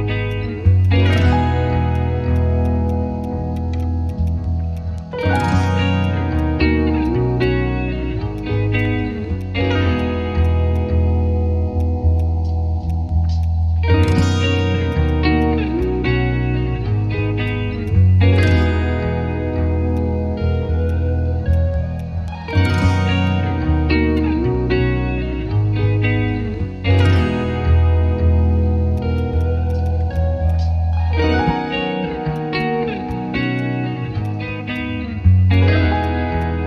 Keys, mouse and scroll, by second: 7.4 shift+click, 14.9 right click, 15.8 shift+click, 17.5 ctrl+click, 28.9 shift+click, 35.8 ctrl+z, 36.2 ctrl+z, 36.6 ctrl+z.